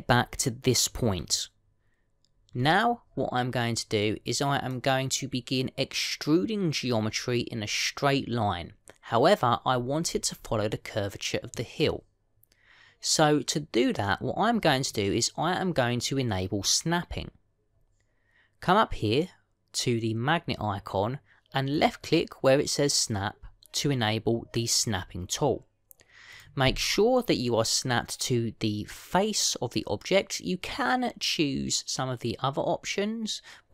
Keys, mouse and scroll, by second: 3.4-7.1 scroll up 5, 10.5-11.4 scroll down 9, 11.4 middle click, 22.6 click, 27.2 click.